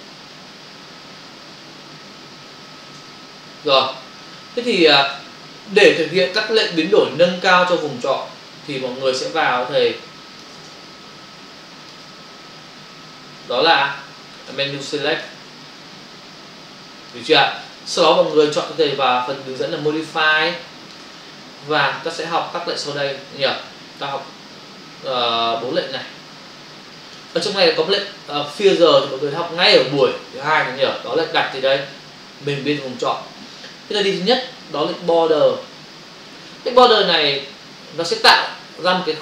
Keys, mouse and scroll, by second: 4.3 ctrl+click, 5.7 f, 8.7 space, 9.1 ctrl+click, 10.8 ctrl+space, 13.8 ctrl+alt+z, 14.5 shift+click, 15.7 ctrl+click, 17.6 click, 20.3 click, 21.2 space, 25.8 click, 29.1 click, 34.6 click.